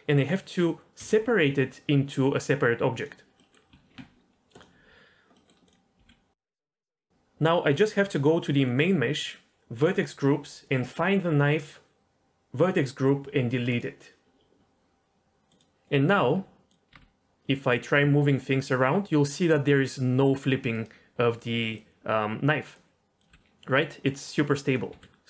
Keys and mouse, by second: 1.0 p, 3.4 middle click, 3.7 Tab, 4.6 click, 5.3 middle click, 6.0 g, 7.1 ctrl+z, 8.7 click, 9.9 click, 13.7 click, 15.5 click, 16.2 Tab, 16.9 r, 17.0 r, 23.3 g, 24.7 click, 24.9 g.